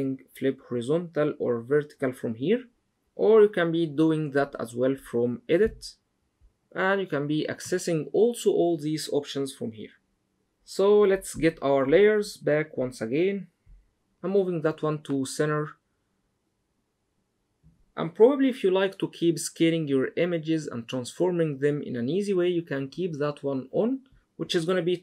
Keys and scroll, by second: 14.1 super+z.